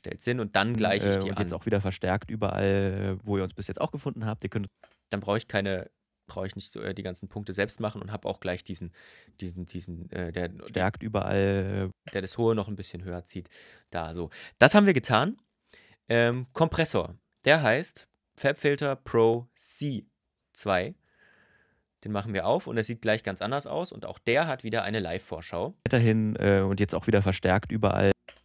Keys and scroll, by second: 0.5 space, 4.4 space, 10.4 space, 11.7 space, 25.6 space, 27.9 space.